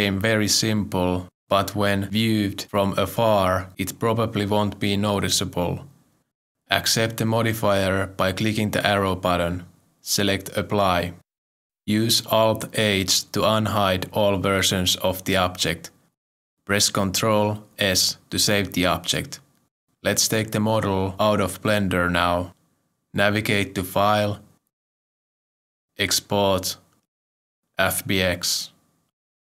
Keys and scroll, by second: 14.9 alt+h, 18.1 ctrl+s.